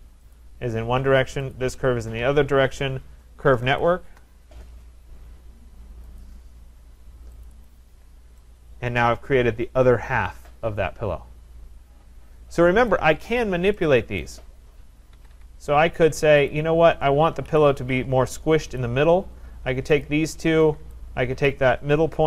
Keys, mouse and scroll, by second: 0.6 click, 1.5 click, 3.5-4.6 typing, 6.2 click, 7.5 click, 7.7 click, 8.1-8.4 scroll, 12.9 right click, 13.5-13.8 scroll, 14.2 right click, 15.1 Escape, 15.3 Escape, 15.5-16.4 scroll, 16.5 click, 16.5-16.9 scroll down 3, 17.5 Delete, 18.8 click, 20.1 shift+click, 21.5 click, 22.1-22.2 typing.